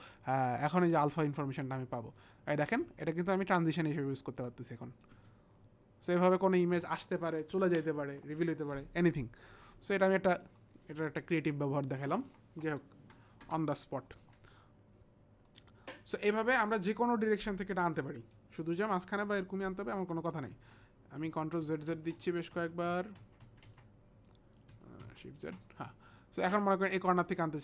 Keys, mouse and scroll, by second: 2.2 click, 2.7 space, 4.5 click, 5.1 space, 6.6 space, 10.4 click, 11.9 click, 12.2 Delete, 13.4 Return, 15.5 click, 17.6 click, 17.9 click, 21.2 ctrl+z, 21.2 click, 21.6 ctrl+z, 22.0 ctrl+z, 22.2 ctrl+z, 22.5 ctrl+z, 22.8 ctrl+z, 25.0 ctrl+shift+z.